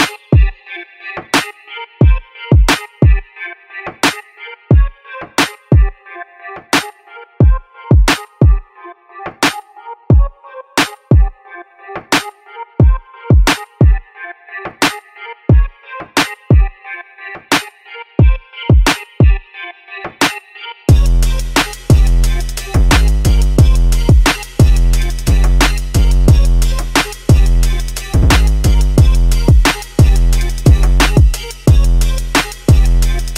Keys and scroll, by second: 1.8 d, 2.4 a, 8.6-12.2 typing, 13.6 typing, 17.3-19.4 typing, 20.9-26.9 typing.